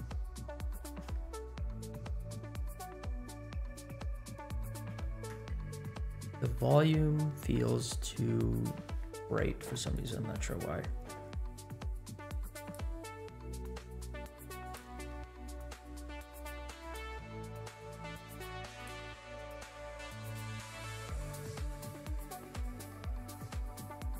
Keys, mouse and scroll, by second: 0.2-2.4 scroll down 12, 2.4 middle click, 4.3-4.8 scroll down 4, 4.9 shift+middle click, 5.7 scroll up 2, 6.0 space, 7.6 space, 8.2-8.8 scroll down 3, 9.9-10.4 drag, 12.6 click, 14.6 click, 16.7 click, 18.8-22.8 drag, 23.4-24.1 drag.